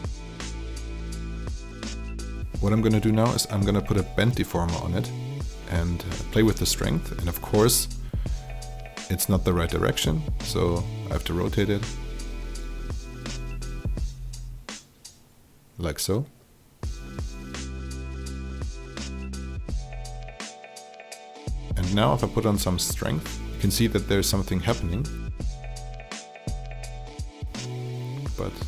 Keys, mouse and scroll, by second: 3.1-6.5 drag, 9.1 KP_0, 10.7 r, 11.8-13.6 drag, 14.5 click, 16.4 alt+click, 18.4-26.0 drag, 26.0 KP_0, 28.3-28.6 drag.